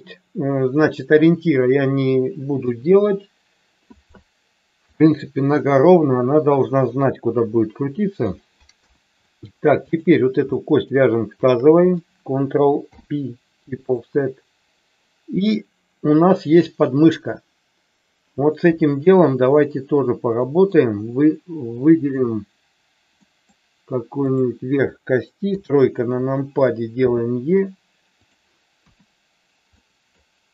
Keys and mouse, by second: 2.6 KP_1, 4.9-8.3 middle drag, 8.8 KP_1, 10.5 shift+middle click, 11.4 shift+click, 12.9 ctrl+p, 18.6 KP_3, 20.4 middle click, 23.1 middle click, 24.3 click, 25.5 KP_3, 27.0 e, 28.1 click, 28.8 KP_1, 29.8 middle click.